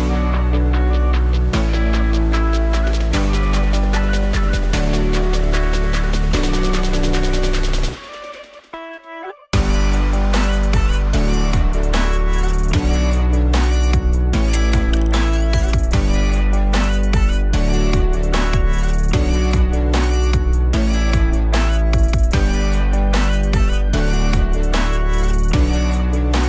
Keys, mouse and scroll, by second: 0.2-0.8 scroll up 2, 0.8-2.2 alt+middle drag, 2.2-6.0 right drag, 6.0-7.2 alt+drag, 7.2 z, 7.9 click, 8.2 alt+shift+click, 8.4 alt+shift+click, 8.8 alt+click, 10.0-11.3 alt+drag, 11.3 KP_1, 12.5 z, 13.0 s, 17.7 alt+middle click, 24.8 alt+right click, 25.2 ctrl+z, 26.0 ctrl+r.